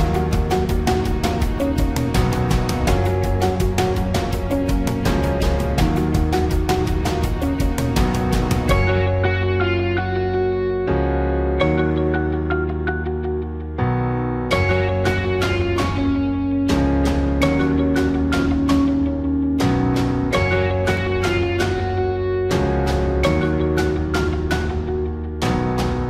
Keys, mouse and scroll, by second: 23.0 ctrl+t, 25.2-26.0 alt+shift+drag.